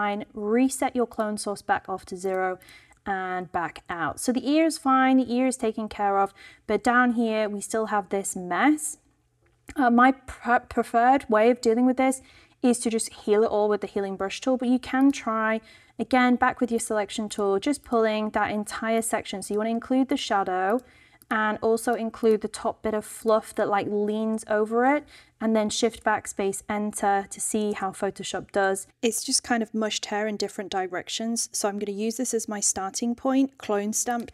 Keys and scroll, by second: 25.6 shift+BackSpace, 25.8 shift+Return, 26.7 Return, 27.6 super+d.